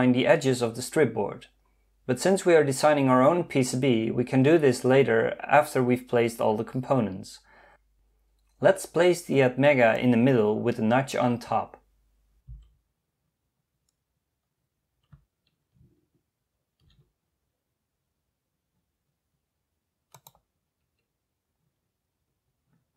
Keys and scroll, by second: 12.5 m.